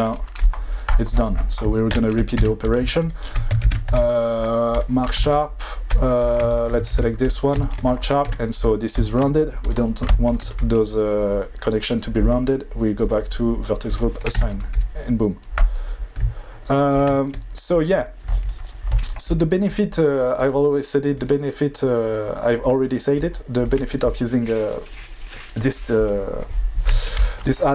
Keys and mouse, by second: 2.4 2, 3.0 alt+click, 3.6 ctrl+e, 5.1 2, 5.3 click, 6.2 click, 6.5 ctrl+click, 6.8 ctrl+e, 8.3 1, 10.2 shift+click, 13.9 click, 14.3 Tab, 21.9 click, 23.1-26.8 drag.